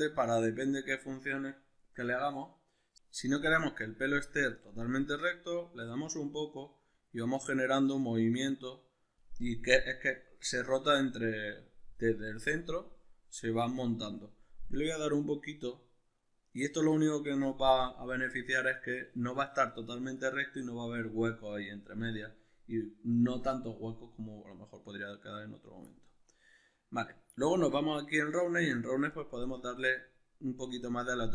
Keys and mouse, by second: 26.6-27.4 middle drag, 27.4-27.8 drag, 27.8-31.3 middle drag.